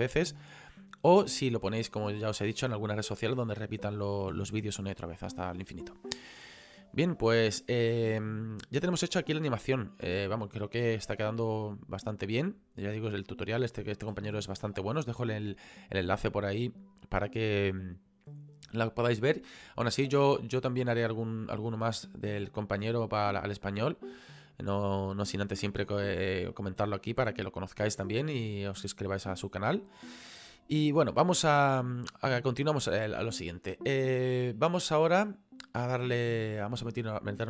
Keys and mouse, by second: 20.1 click, 22.3 click, 27.1 click.